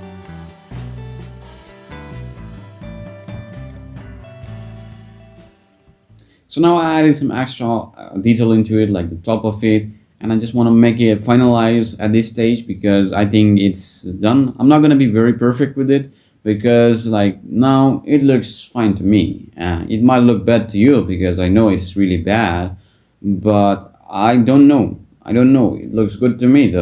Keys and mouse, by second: 0.3-0.7 drag, 0.9 click, 1.2 click, 1.5 Tab, 1.6 a, 1.9 shift+n, 2.1 Tab, 2.5 click, 2.9 click, 3.0 Return, 4.2 click, 5.6 ctrl+click, 6.2 shift+click, 6.9 shift+click, 8.2 ctrl+click, 11.1 click, 13.1 shift+d, 13.5 click, 14.0 p, 15.9 Tab, 16.2 click, 17.1-17.8 middle drag, 18.5 Tab, 20.5 Tab, 20.7 click, 20.9 Tab, 22.7 ctrl+r, 23.2 click, 25.4 click.